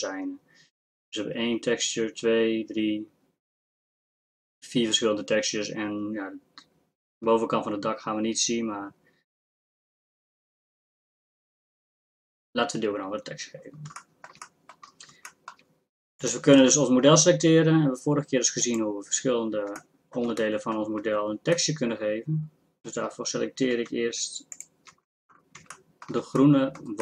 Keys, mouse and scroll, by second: 16.7 Tab, 24.5 middle click, 26.4 click.